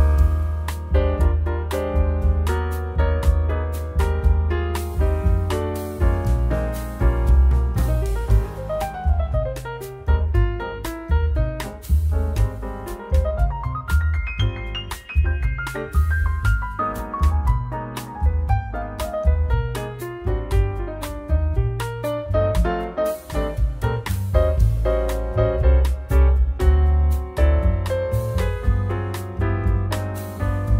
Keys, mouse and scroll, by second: 2.0 click, 4.0 click, 4.7 click, 6.0-6.4 scroll up 4, 6.4 scroll down 2, 6.6 middle click, 7.3-7.9 scroll down 5, 8.0-9.0 scroll up 6, 10.1 click, 10.5 shift+d, 11.2 click, 11.7 click, 14.1 click, 15.2 click, 17.4-17.8 scroll down 4, 17.6 middle click, 17.8-18.1 scroll up 3, 18.1 middle click, 18.8 scroll up 1, 19.6 click, 20.2-20.8 scroll down 3, 20.2 middle click, 20.8 middle click, 21.5-21.9 scroll up 3, 21.9 middle click, 24.7 click, 25.3 click, 29.0-30.2 scroll down 4, 30.2 click, 30.2-30.6 scroll down 1.